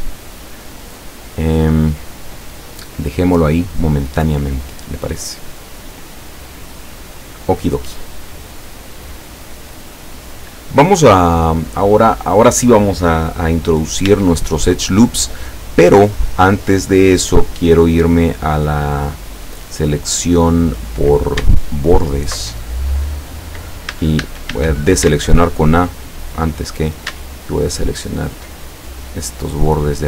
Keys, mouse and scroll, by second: 1.3-1.9 scroll up 1, 2.1 scroll down 1, 2.9-5.3 middle drag, 5.3-5.7 scroll down 1, 6.3-9.0 middle drag, 9.3-11.4 middle drag, 12.0-12.4 scroll up 1, 12.9 scroll down 1, 14.1 Tab, 15.0-16.9 middle drag, 18.2 click, 19.5 scroll down 2, 19.9-21.2 middle drag, 21.8 alt+shift+right click, 22.5-24.0 alt+shift+middle drag, 24.0 a, 25.4-26.7 alt+shift+middle drag, 27.7 alt+shift+right click, 28.7-29.3 alt+shift+scroll up 3, 29.7 scroll down 2.